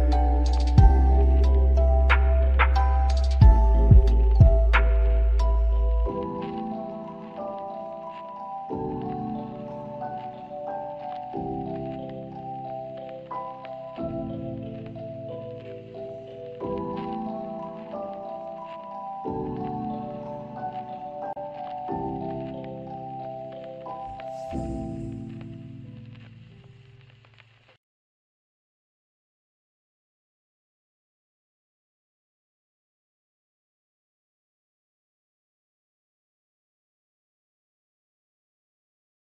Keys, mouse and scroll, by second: 0.3 double click, 2.4 alt+click, 3.3 alt+scroll up 1, 3.8 alt+click, 5.4 alt+middle click, 6.5 scroll up 1, 7.3 middle click, 8.5 alt+scroll down 1, 9.5 alt+middle click, 10.5 scroll up 1, 13.1 scroll down 1, 14.6-14.9 scroll down 1, 14.9-16.0 scroll up 1, 17.7-18.5 typing, 21.3 alt+middle click, 23.9 right click, 25.8 scroll up 1, 26.5 alt+middle click, 32.3 alt+middle click, 34.0 double click, 35.0 middle click, 35.7 alt+click, 36.9 typing, 37.7 scroll up 1, 38.1-38.8 typing, 38.4 alt+click.